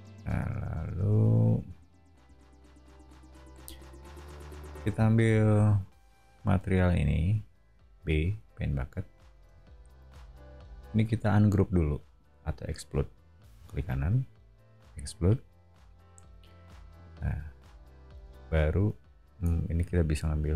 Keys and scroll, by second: 4.6 o, 8.0 b, 9.3 space, 17.0 b.